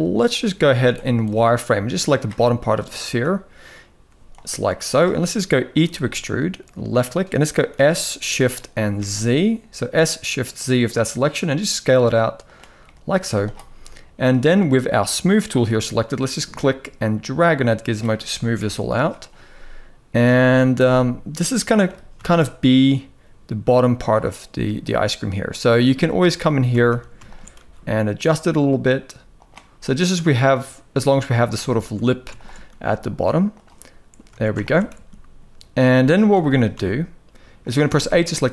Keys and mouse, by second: 0.4 z, 1.0 click, 4.0 click, 5.5 e, 7.4 s, 12.5 middle click, 12.9 z, 13.4 middle click, 16.2-17.6 drag, 18.3 KP_1, 20.0 a, 20.4 s, 21.5 g, 25.9 click, 26.4 alt+a, 27.2 s, 31.3 alt+shift+click, 34.0 alt+a, 34.6 s, 36.0 g, 37.5 a.